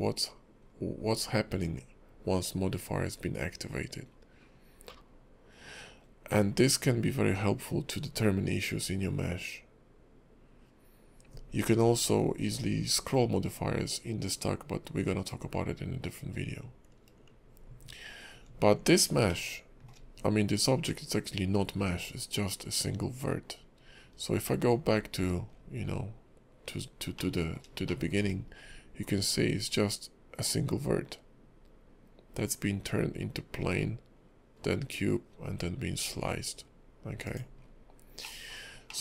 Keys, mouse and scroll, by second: 19.4 shift+middle click, 27.2 middle click, 27.9 shift+middle click, 37.6-38.2 scroll down 4, 38.2 middle click, 38.9 shift+middle click.